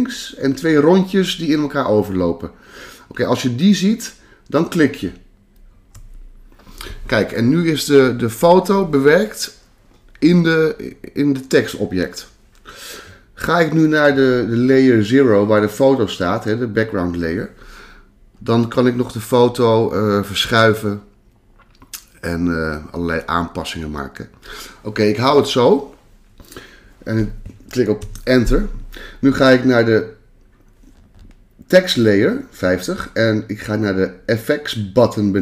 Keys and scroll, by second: 28.0 Return.